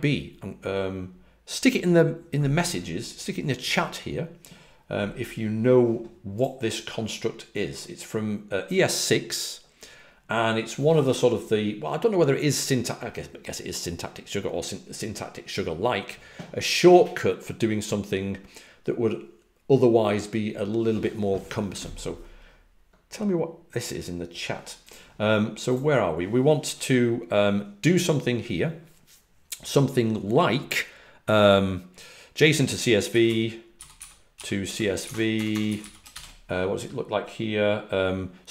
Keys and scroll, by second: 33.4-36.2 typing.